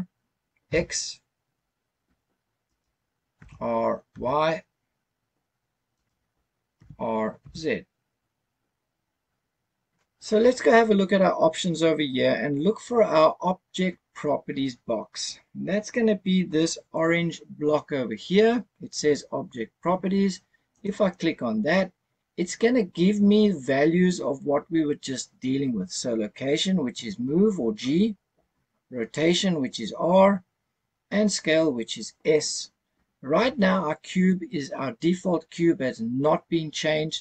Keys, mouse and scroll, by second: 0.6 x, 2.7 right click, 3.3 r, 4.1 y, 6.0 right click, 6.8 r, 7.4 z, 20.7 click.